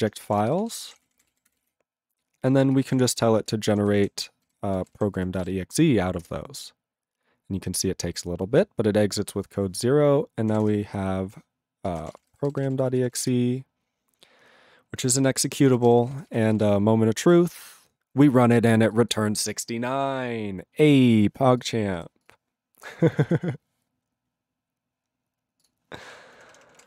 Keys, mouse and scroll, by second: 25.6 click, 26.3 ctrl+p, 26.5 ctrl+p, 26.7 ctrl+p, 26.8 ctrl+space.